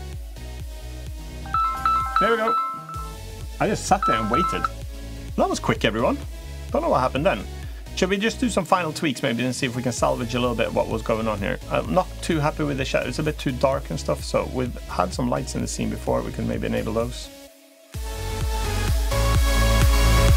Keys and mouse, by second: 8.3-8.7 middle drag, 9.4-10.7 middle drag, 11.5-11.9 middle drag, 14.7 click, 16.0-16.6 middle drag, 19.7 click.